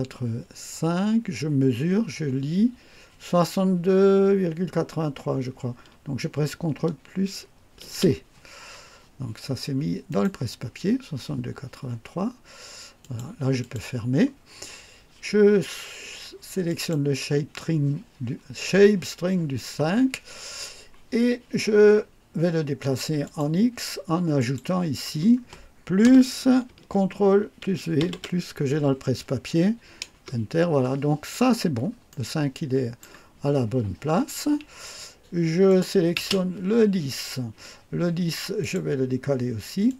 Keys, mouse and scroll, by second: 7.9 ctrl+c, 10.1 click, 13.0 click, 13.6 click, 16.7 click, 23.3 click, 24.4 click, 28.0 ctrl+v, 30.1 Return, 31.4-31.8 scroll down 2, 32.1 right click, 35.7 click, 36.2 space, 38.6 click, 39.9 click.